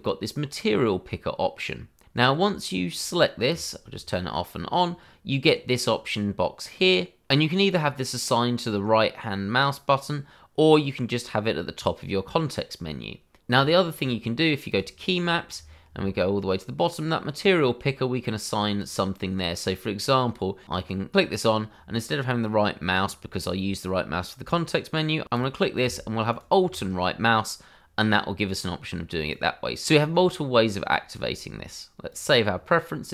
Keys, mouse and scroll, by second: 2.9 click, 4.5-5.1 scroll down 1, 13.4-14.7 scroll up 1, 14.7 click, 15.2-15.6 scroll down 1, 18.2 click, 20.7 click, 25.3 click, 26.3 alt+right click, 29.3 click, 32.1 click.